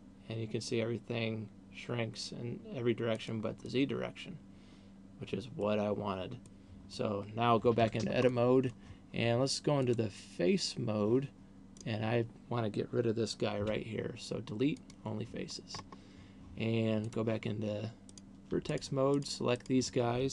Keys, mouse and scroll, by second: 3.7 click, 4.2 middle click, 6.7 middle click, 7.9 Tab, 8.7 middle click, 9.9 click, 11.9 right click, 13.9 Delete, 15.9-16.6 scroll up 3, 17.4 click, 18.4 right click, 18.9 shift+right click, 19.4 right click, 19.9 shift+right click.